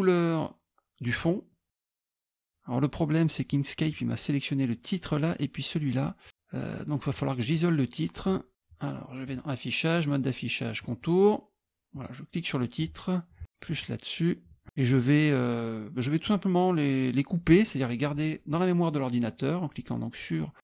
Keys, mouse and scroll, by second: 1.1 click, 1.9-3.0 middle drag, 7.1 click, 7.5 click, 9.2 click, 10.8 click, 11.9 click, 13.7 shift+click.